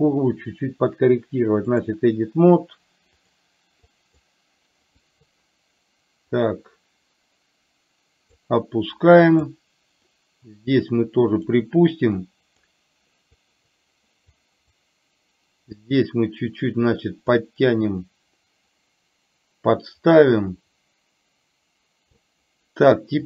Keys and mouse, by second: 3.2 click, 4.0 click, 5.1 click, 6.5 click, 6.7-8.5 drag, 9.1 click, 10.1-11.6 drag, 12.4 click, 13.5 click, 14.4 click, 16.0-17.5 drag, 18.2-22.2 drag.